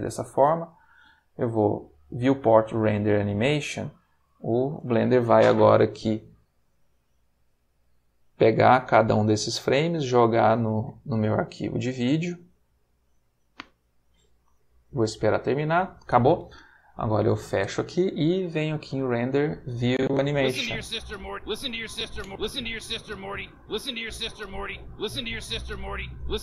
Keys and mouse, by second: 0.8 click, 3.3 click, 17.2 click, 18.7 click, 19.8 click, 21.1 click.